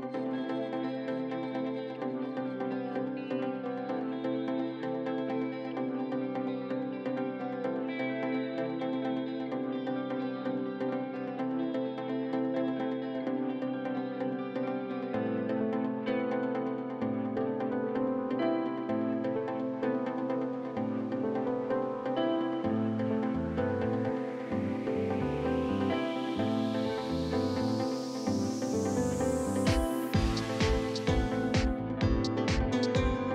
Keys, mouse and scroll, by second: 3.0-3.4 scroll down 1, 3.4 scroll up 1, 3.6-5.2 drag, 6.0 s, 7.8-9.2 drag, 9.2 s, 11.5 click, 12.1 s, 13.3 click, 14.3 s, 15.3 ctrl+r, 17.5 click, 18.0 shift+middle click, 18.8 ctrl+r, 19.4 shift+middle click, 20.0 click, 20.9 shift+middle click, 21.4 e, 22.0 click, 22.7 s, 23.4 click, 23.9 r, 24.5 click, 25.0 r, 25.5-26.5 drag, 26.5 e, 27.2 click, 27.8 r, 29.1-30.2 drag, 32.6 shift+click, 33.0 shift+middle click.